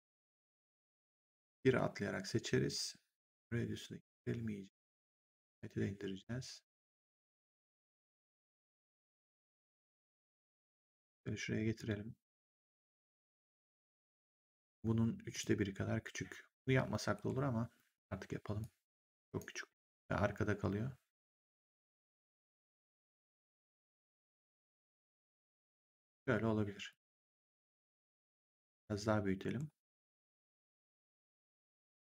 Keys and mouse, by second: 3.2 click, 5.4 click, 7.1 click, 8.6 click, 9.8 w, 10.6 click, 12.5 click, 14.3 middle click, 15.2 click, 18.5 click, 19.7 click, 22.3 click, 26.0 w, 26.8 click, 31.6 click.